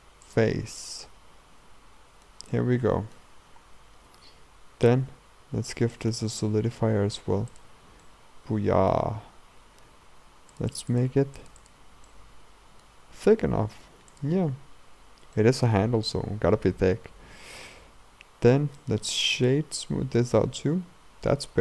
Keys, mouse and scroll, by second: 0.7-3.5 middle drag, 3.5-4.1 scroll down 2, 4.1 Tab, 7.6 click, 8.1-10.6 middle drag, 10.6-12.1 drag, 12.1-14.1 middle drag, 14.1 click, 14.9-15.4 scroll down 2, 15.4-17.9 shift+middle drag, 17.9 Tab, 18.5 Tab, 18.8-19.9 right drag, 19.9-20.4 scroll up 2, 20.4-21.6 middle drag.